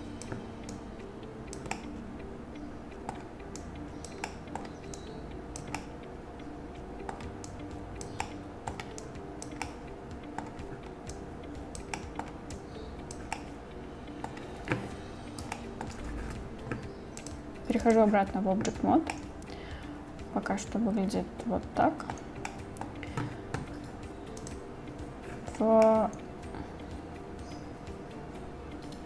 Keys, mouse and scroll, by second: 0.7-1.6 drag, 1.8-3.1 drag, 3.1 middle drag, 3.6 click, 4.3 middle click, 5.0 click, 5.8-6.6 drag, 6.6-7.1 middle drag, 7.5 click, 8.3-8.7 middle drag, 9.0 click, 9.7-10.4 middle drag, 11.2 click, 12.0 middle drag, 12.6 click, 13.4-14.3 middle drag, 15.6 shift+middle drag, 17.3-18.0 drag, 19.2 drag, 19.3-22.2 middle drag, 22.5-22.9 drag, 25.9-27.3 drag, 27.3-29.0 middle drag.